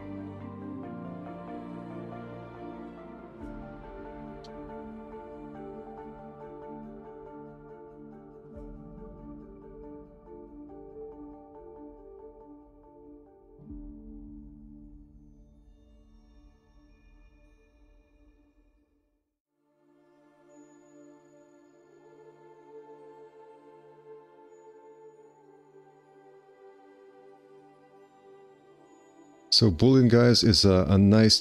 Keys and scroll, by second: 3.0 2, 3.2 q, 4.7 r, 5.1 c, 5.2 2, 9.2 2, 13.3 r, 24.6 q, 25.8 5, 27.6 F4, 31.2 F4.